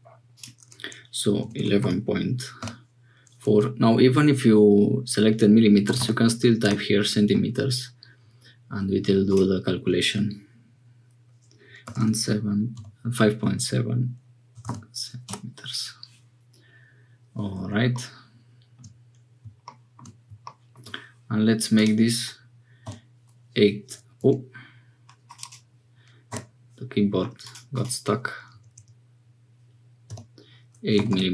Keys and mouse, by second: 0.3-7.5 drag, 1.5 1, 9.2-15.9 drag, 21.7-31.3 drag, 28.7 BackSpace, 31.1 m.